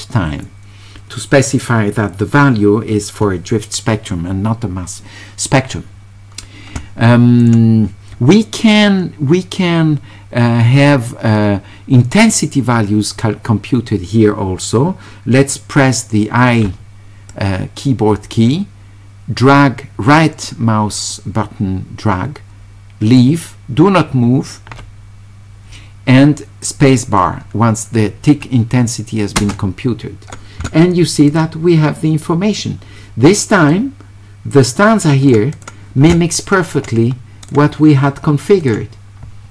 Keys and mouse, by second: 17.3-19.0 drag, 19.0-23.2 right drag, 29.4 space, 31.3 click, 33.7-35.3 drag, 35.6 click, 37.5 click, 38.6 click.